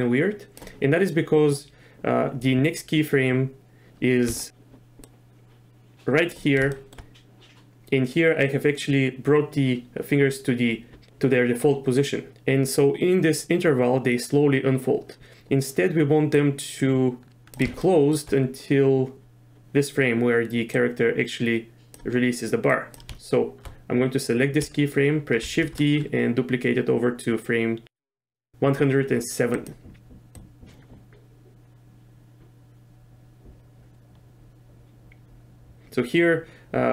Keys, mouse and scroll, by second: 4.4 shift+middle click, 5.1-6.3 drag, 6.7 shift+middle drag, 16.4 click, 17.8 shift+middle drag, 20.8 click, 22.7 click, 25.5 shift+d, 30.4-36.9 drag.